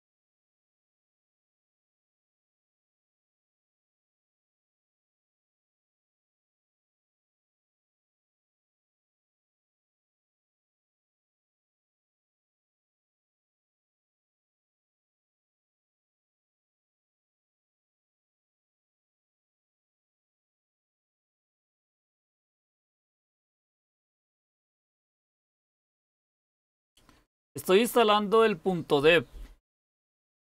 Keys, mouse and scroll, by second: 0.9-2.1 typing, 3.9-5.3 typing, 11.3-12.1 typing, 13.1 typing, 15.1-15.5 typing, 22.2 Return, 23.6-26.7 typing, 28.1-28.8 typing.